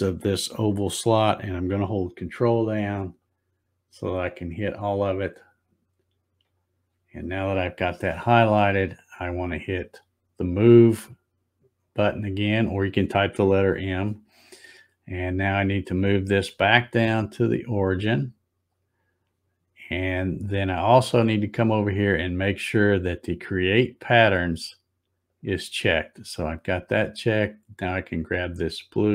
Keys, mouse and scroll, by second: 3.1 ctrl+click, 4.3 ctrl+click, 6.4 ctrl+click, 8.7 scroll up 1, 9.3 scroll up 2, 13.2 click, 16.4-18.7 drag, 25.3 click, 28.1-29.1 drag.